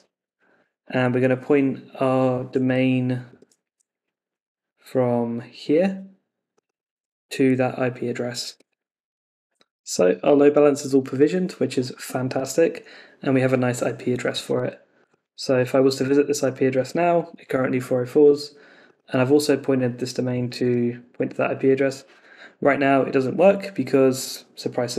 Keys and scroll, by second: 2.6 super+Tab, 8.4 super+Tab, 15.9 shift+super+r, 20.6 shift+super+r.